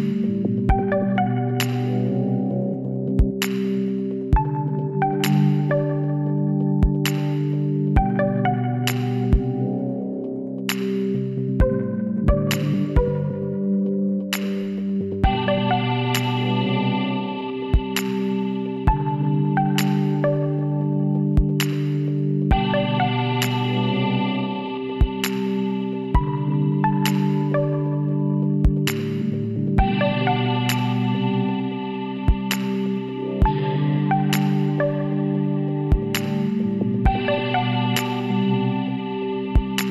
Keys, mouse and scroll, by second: 1.7-2.8 middle drag, 1.7 l, 2.8 KP_1, 4.9-6.5 drag, 7.4-10.3 middle drag, 10.8-12.6 drag, 15.2-17.8 middle drag, 17.8 KP_1, 24.3 ctrl+r, 27.7 ctrl+r, 30.2 click, 31.1-32.2 middle drag, 32.2-33.5 drag, 33.1 right click, 33.5 KP_1, 34.9 e, 38.3 ctrl+r.